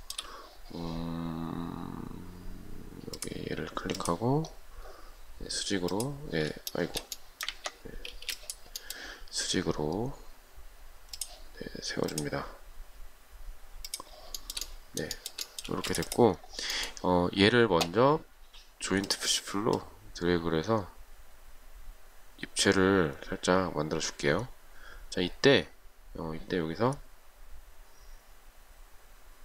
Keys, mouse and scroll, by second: 0.2 shift+middle click, 7.0 shift+middle click, 7.7 ctrl+z, 8.4 space, 14.7 shift+middle click, 16.0 space.